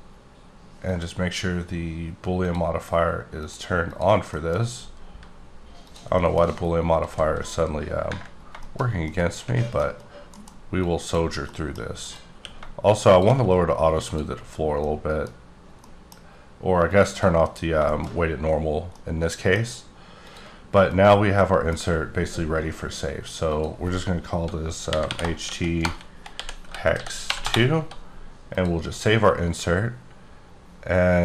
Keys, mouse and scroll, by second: 0.9 click, 2.4 click, 3.4 click, 3.9 click, 4.3 middle click, 4.5 scroll up 3, 5.9 click, 6.2 shift+middle click, 6.4 shift+scroll up 3, 7.0 s, 8.2 scroll up 1, 8.3-8.9 scroll down 5, 8.6 shift+middle click, 9.1 middle click, 9.9 scroll up 1, 10.3 alt+m, 10.8 click, 11.5 middle click, 12.0 click, 12.3 q, 13.1 shift+click, 13.4-14.0 scroll down 4, 14.0 click, 14.5 scroll up 2, 14.8 middle click, 15.6 scroll down 1, 15.8 middle click, 16.2 scroll up 1, 17.1 click, 17.7 scroll down 2, 17.9 shift+middle click, 18.1 scroll up 1, 18.6 scroll down 2, 18.9 middle click, 20.2 click, 21.4 middle click, 23.5 click, 24.8-25.4 typing, 26.6-27.2 typing, 27.4 Return, 28.5 click.